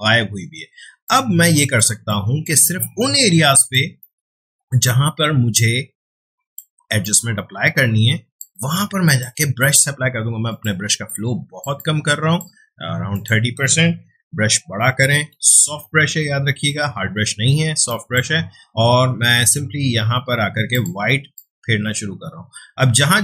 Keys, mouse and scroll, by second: 0.6 ctrl+space, 1.0-3.6 ctrl+drag, 4.0 right click, 5.5-13.1 drag, 14.3-15.3 typing, 15.8 right click, 17.8 click, 20.7-23.2 drag.